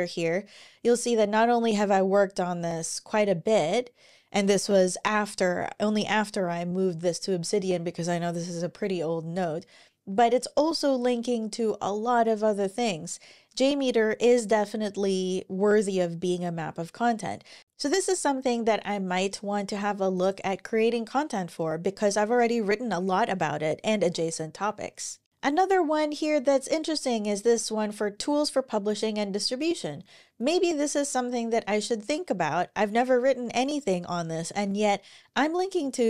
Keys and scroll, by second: 23.8 super+w.